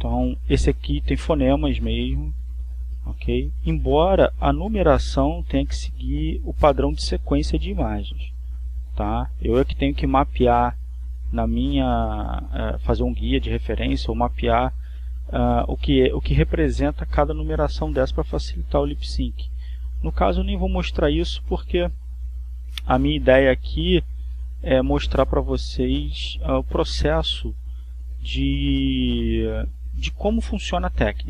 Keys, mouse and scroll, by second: 3.0-4.4 drag, 4.9 click, 7.5 click, 20.4 click, 22.9 click, 25.6 click, 27.5-28.8 drag, 29.5-31.1 drag.